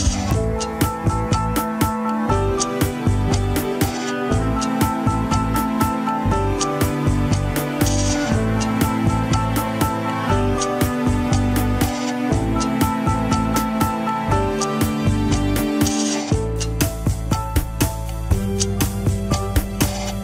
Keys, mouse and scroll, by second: 0.9 ctrl+z, 1.6 scroll down 3, 1.9-4.2 middle drag, 4.2 alt+z, 4.4-6.3 middle drag, 6.3 ctrl+click, 6.6-8.0 middle drag, 8.0 ctrl+click, 8.6 alt+z, 8.8-9.8 middle drag, 9.8 scroll down 2, 9.9 KP_1, 10.2 ctrl+Tab, 11.1 ctrl+s, 11.3 click, 11.8-13.5 middle drag, 13.5 KP_1, 14.4 ctrl+Tab, 15.2 alt+r, 15.6 alt+g, 16.7 click, 17.3 g.